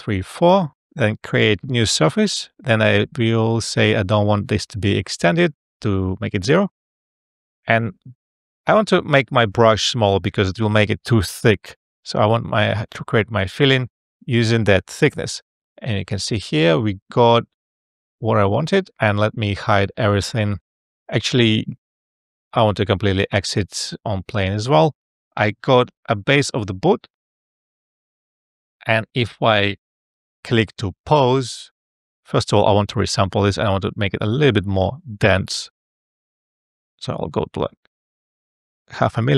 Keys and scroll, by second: 5.5 0, 5.8 Return, 9.9 [, 25.3 a, 25.7 f, 35.4 space.